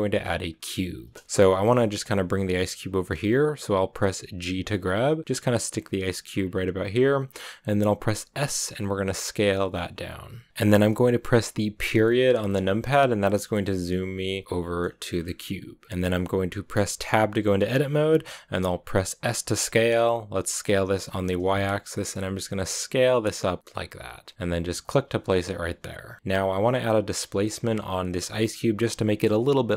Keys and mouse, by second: 1.3 shift+middle drag, 4.2 g, 6.3-7.8 drag, 7.8 s, 9.8 click, 10.1 g, 10.3 click, 10.9 KP_0, 13.7 KP_Decimal, 17.0 Tab, 19.0 s, 20.2 y, 24.7 click, 26.0-27.0 drag, 28.0 click.